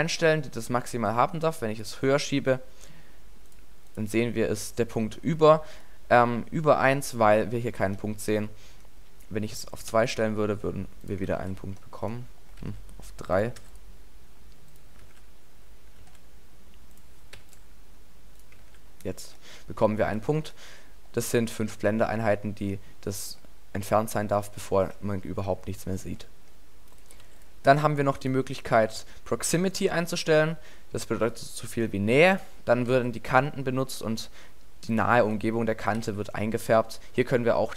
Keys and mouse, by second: 2.9 middle click, 4.1 alt+a, 5.4 alt+a, 11.4 alt+a, 12.7 alt+a, 15.1 alt+a, 16.0 alt+a, 18.7 alt+a, 20.2 alt+a, 32.9 alt+a, 34.1 alt+a, 35.2 alt+a, 36.0 alt+a.